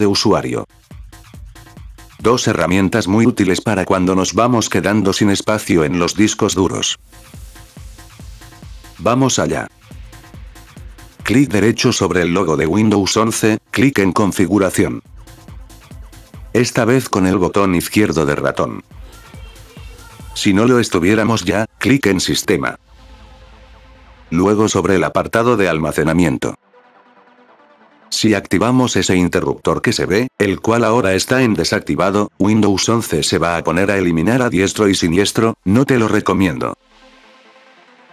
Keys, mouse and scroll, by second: 11.0 right click, 14.3 click, 17.8 click, 18.8 click, 21.1 click, 22.6 click, 24.8 scroll down 2, 25.0 scroll up 2, 25.6 scroll up 2, 27.2 click, 29.7 scroll up 6, 32.5 click.